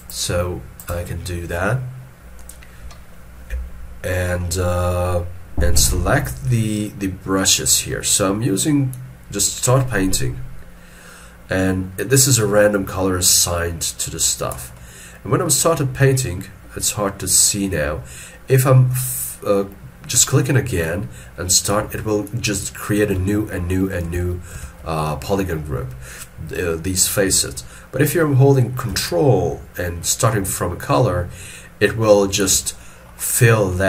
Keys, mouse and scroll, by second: 5.7 middle click, 24.1 ctrl+z, 24.6 ctrl+z, 29.1 ctrl+click, 32.8 middle click, 33.2 scroll up 1, 33.3 scroll down 1.